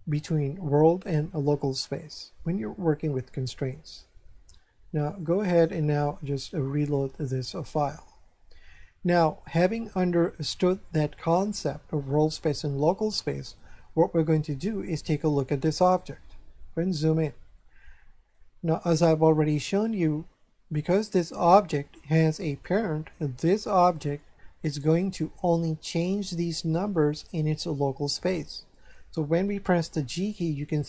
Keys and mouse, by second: 5.2 click, 7.5 click, 15.8 right click, 17.5 shift+middle click, 29.9 g.